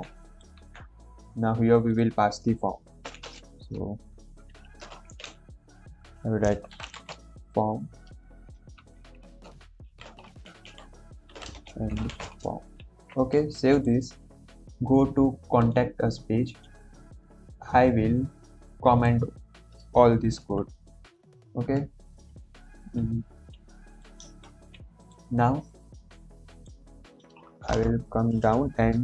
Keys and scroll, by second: 0.5 ctrl+v, 3.2 ,, 3.2 space, 4.0 shift+[, 5.0 Left, 5.1 Left, 6.6-7.5 typing, 9.8 shift+', 10.3 Right, 10.6 Right, 11.2-12.6 typing, 12.7 ctrl+s, 20.3 ctrl+/, 24.3 ctrl+s, 27.7 Return.